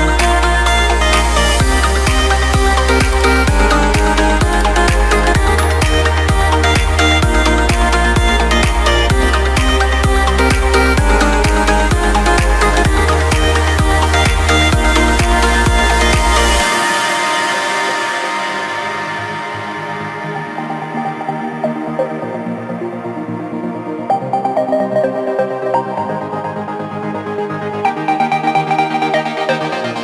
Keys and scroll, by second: 4.9 ctrl+space, 11.9 ctrl+z, 12.5 ctrl+space, 17.6 ctrl+space, 19.0 ctrl+c, 21.7 ctrl+space, 23.3 ctrl+v, 27.6 ctrl+v.